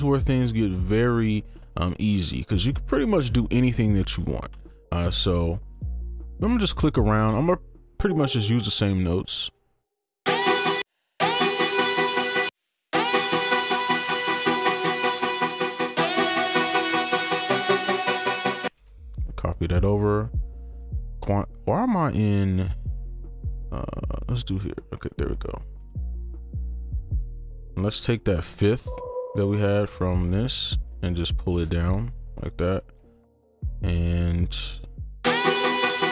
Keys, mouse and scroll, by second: 4.0 right click, 5.9 double click, 9.5 alt+click, 10.2 space, 12.4 space, 12.9 space, 13.9 double click, 18.4 ctrl+click, 18.7 space, 19.0 shift+click, 20.9 ctrl+a, 21.1 ctrl+q, 24.5 right click, 25.4 ctrl+click, 25.8 ctrl+a, 26.8 right click, 27.8 ctrl+q, 28.2 right click, 29.5 click, 31.0 click, 31.8 ctrl+shift+Down, 32.1 right click, 32.8 click, 35.2 space.